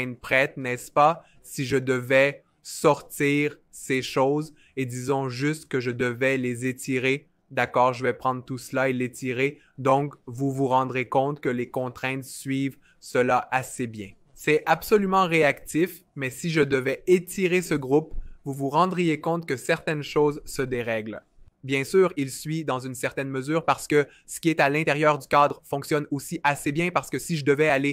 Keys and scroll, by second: 9.2 v.